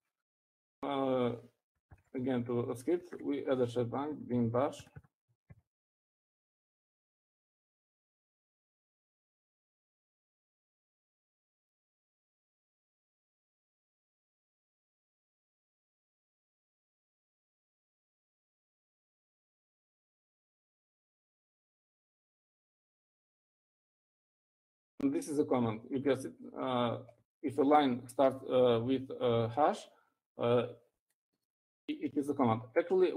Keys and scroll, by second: 0.8 Up, 1.6 o, 3.6 shift+3, 4.8-9.5 typing, 15.0-24.5 typing, 25.6 typing.